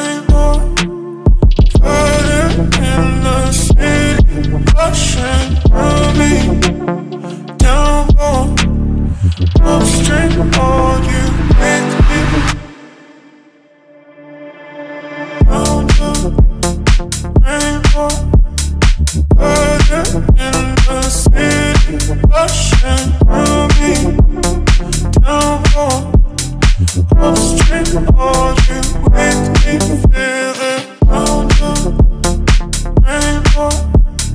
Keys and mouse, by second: 1.2 click, 1.5 click, 1.6 click, 1.7 click, 2.1 click, 3.2 click, 4.8 click, 5.0 click, 5.3 click, 7.3 click, 8.6 middle click, 9.5 1, 10.0 click, 11.7 g, 12.3 click, 12.9-15.2 drag, 15.6 y, 16.3 right click, 16.6 KP_3, 17.1 g, 17.2 y, 17.7 right click, 18.3-20.0 drag, 20.3 y, 21.0 right click, 21.5-23.4 drag, 23.7 y, 27.0 o, 28.2 alt+click, 28.8 middle click, 30.1 alt+shift+click, 30.9 shift+click, 31.4 shift+click, 31.8 middle click, 32.3 KP_3, 33.7 s.